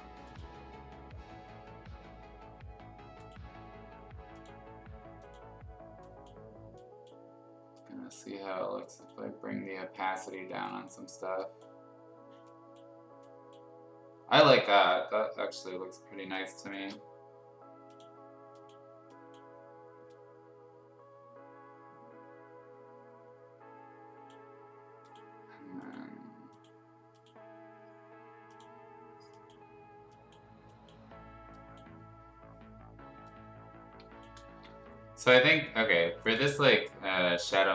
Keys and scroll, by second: 16.2 space, 34.4 ctrl+z.